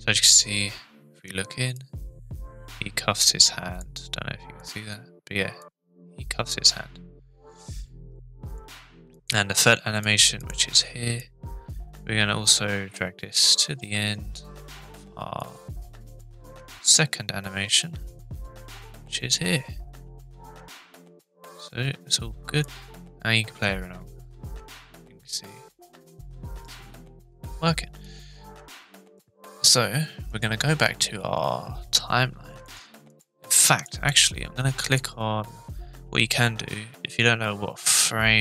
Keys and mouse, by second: 1.7-3.8 drag, 4.6 click, 5.6-8.6 drag, 9.2 click, 11.2-14.3 drag, 15.4-16.2 drag, 18.2-21.6 drag, 22.6-26.6 drag, 28.0 click, 30.3-32.3 drag, 32.6 click, 33.1 click, 33.6 drag, 34.8 click, 38.0-38.4 drag.